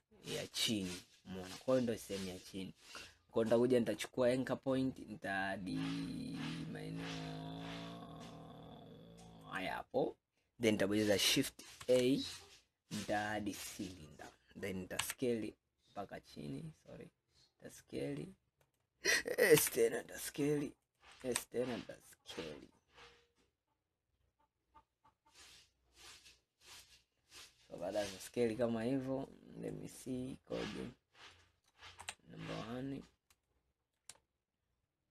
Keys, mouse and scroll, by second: 0.9-4.0 scroll up 5, 4.0-7.2 drag, 9.6 click, 11.9 shift+a, 15.1 s, 19.6 s, 21.3 s, 27.9-28.8 middle drag, 28.8-29.3 scroll down 2, 29.8-32.1 middle drag, 32.1 KP_1, 32.8 scroll down 1, 33.5-34.3 shift+middle drag, 34.3-35.0 scroll up 4, 35.0 scroll up 2.